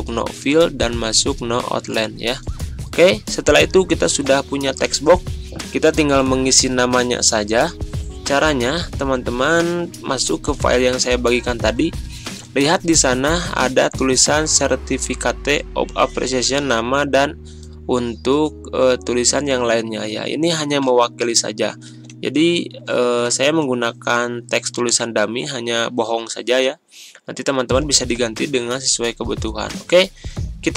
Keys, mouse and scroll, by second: 8.8 click, 9.0 alt+Tab, 10.4 alt+Tab, 12.1-18.4 drag, 15.9-17.8 drag, 18.4 right click, 19.4 click, 20.6 \, 20.8 Tab, 21.9 ctrl+z, 23.3 ctrl+c, 23.8 alt+Tab, 25.2 alt+Tab, 25.7 scroll down 1, 26.4 ctrl+scroll down 1, 28.0 ctrl+v, 29.4-30.7 drag.